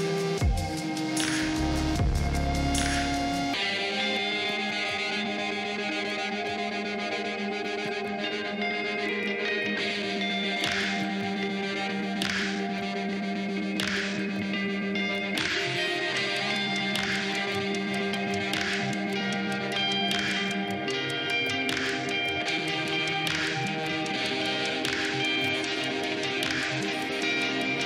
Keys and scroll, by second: 1.6 ctrl+t, 12.0 ctrl+t.